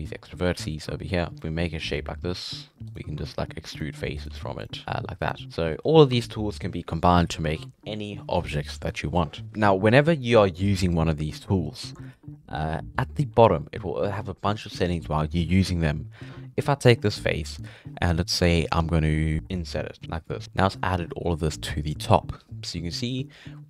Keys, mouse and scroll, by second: 1.3 shift+right click, 2.9 right click, 3.3 e, 4.2 right click, 4.3 e, 4.8 right click, 4.9 e, 5.4 Tab, 5.5 middle drag, 5.8 scroll up 4, 11.3 scroll down 1, 11.4 middle click, 11.8-12.2 scroll up 4, 12.5 scroll up 3, 12.7 middle click, 13.3 3, 13.6-16.2 middle drag, 16.2 ctrl+z.